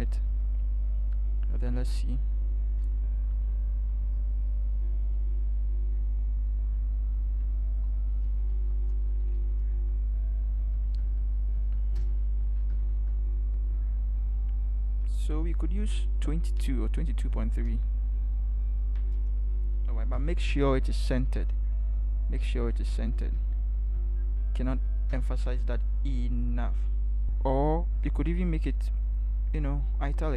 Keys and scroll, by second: 2.8 ctrl+alt+shift+BackSpace, 8.5 ctrl+h, 9.7 Right, 10.8 Right, 12.0 Return, 12.5 Up, 12.8 Up, 12.9 Up, 15.7 ctrl+h, 20.5 ctrl+t, 21.8 ctrl+h, 23.1 Right, 23.3 Right, 23.8 Right, 25.1 Return.